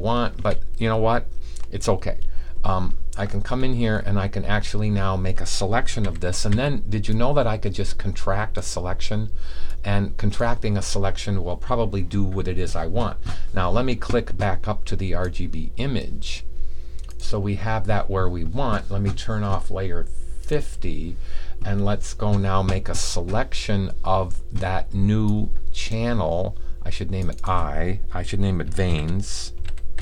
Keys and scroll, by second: 6.5 typing, 28.8-30.0 typing.